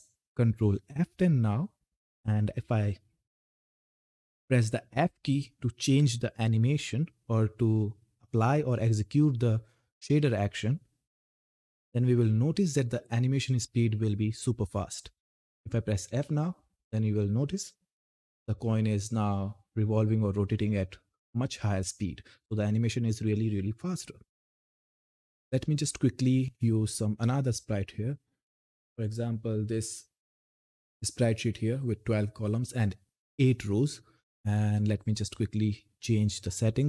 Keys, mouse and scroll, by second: 0.2 ctrl+F10, 15.8 f, 28.5-33.9 drag, 34.7-36.8 drag.